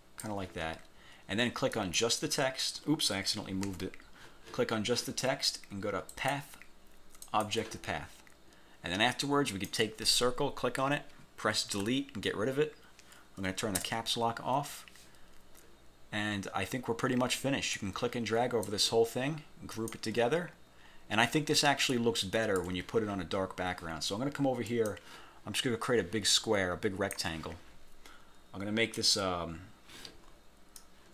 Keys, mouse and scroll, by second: 1.8 click, 3.8 ctrl+z, 6.2 click, 7.4 click, 9.6 click, 11.9 Delete, 13.8 Caps_Lock, 17.8 click, 19.8 click, 21.0 scroll down 1, 21.4 scroll up 1, 22.0 ctrl+click, 24.8 click, 26.0-27.4 drag, 29.1 click, 30.9 click.